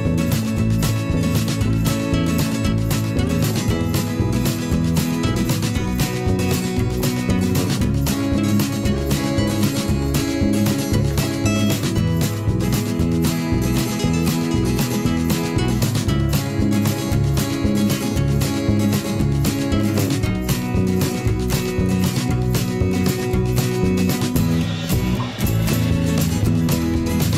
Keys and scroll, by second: 8.4 v.